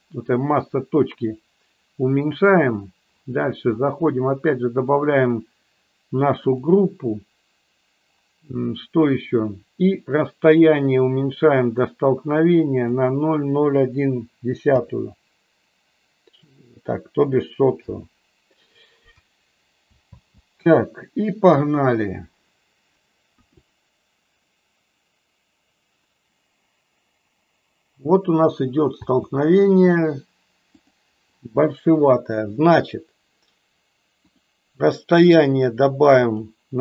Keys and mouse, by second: 4.7-6.6 drag, 10.5-18.4 drag, 20.0 space, 23.5 KP_1, 28.9 space, 30.7 click, 34.3-36.8 drag.